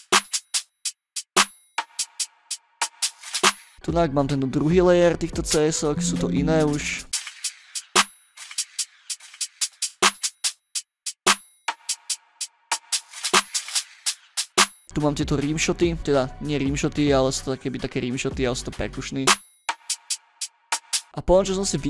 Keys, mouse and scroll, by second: 1.1 ctrl+scroll up 2, 2.1 ctrl+scroll up 2, 2.8 ctrl+scroll up 2, 3.4 space, 4.0 scroll up 2, 4.2 middle click, 4.2 scroll, 4.3 scroll down 2, 4.6-4.9 ctrl+scroll up 4, 5.4 click, 5.6 click, 5.8 right click, 6.3 right click, 6.5 click, 6.6 click, 6.7 click, 6.9 click, 7.1 space, 8.0 ctrl+scroll up 2, 8.8 scroll up 3, 9.3 scroll down 2, 9.5 ctrl+scroll up 2, 10.4 ctrl+scroll down 2, 11.6 ctrl+scroll up 2, 14.6 space, 15.2 click, 15.7 middle click, 15.7 scroll down 2, 19.2 space, 20.9 space, 21.1 scroll down 2, 21.6 ctrl+scroll up 2.